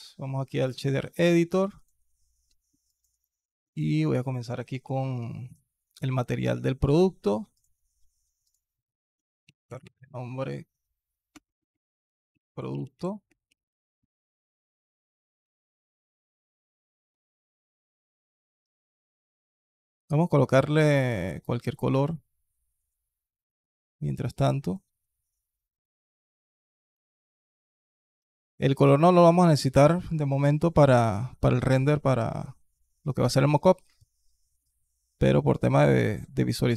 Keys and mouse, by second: 1.5 alt+click, 2.3 alt+drag, 2.7 alt+click, 4.1 click, 7.4 click, 8.2 click, 11.3 BackSpace, 11.4 BackSpace, 15.3 n, 15.5 click, 16.7 click, 17.4 shift+a, 27.1 click, 28.2 click, 29.3 middle click, 30.6 middle click, 30.9 middle click, 32.1 middle click, 33.8 middle click.